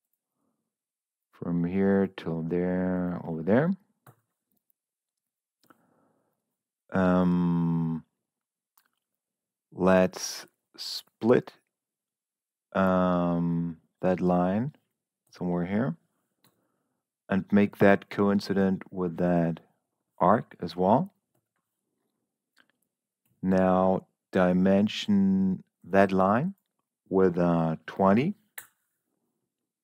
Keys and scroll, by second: 4.4 Escape, 15.7 Escape, 16.3 l, 21.7 Escape, 23.1 d, 27.6 2, 28.1 0, 28.5 Return.